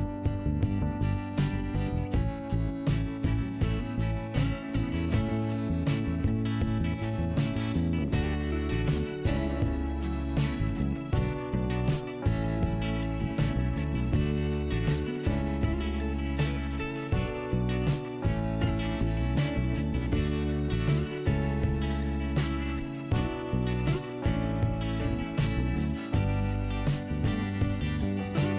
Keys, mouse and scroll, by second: 0.9 click, 2.9 click, 3.0 click, 3.8 click, 3.9 click, 4.5 scroll up 2, 6.1 click, 7.2 click, 9.3 scroll up 1, 9.7 scroll down 2, 10.9 click, 12.4 click, 16.6 click, 16.6 click, 17.0 scroll down 1, 18.7 click, 20.0 click, 23.2 click, 23.3 click, 24.2 click, 24.3 click, 24.9 scroll up 1, 26.5 click, 27.6 click.